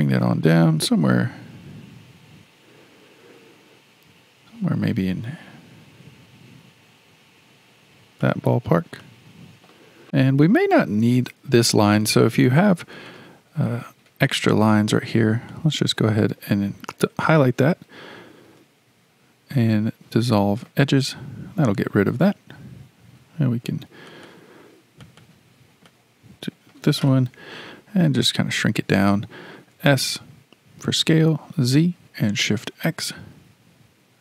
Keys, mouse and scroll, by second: 9.0-10.0 shift+middle drag, 12.1-13.1 shift+middle drag, 13.1 click, 14.1 2, 14.3 click, 14.5 click, 15.5-18.4 shift+middle drag, 18.4 x, 23.2 2, 24.1 click, 24.3 click, 25.0 click, 25.2 click, 25.9-27.3 middle drag, 27.3 KP_1, 29.7 s.